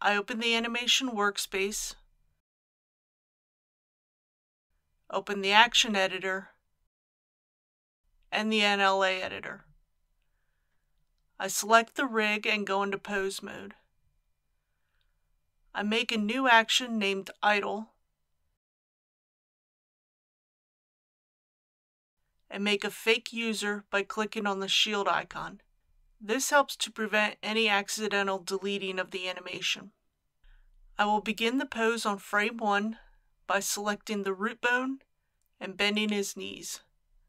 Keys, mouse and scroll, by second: 12.3 Tab, 13.1 a, 15.2 click, 17.8-18.3 typing, 18.7 Return, 24.3 click.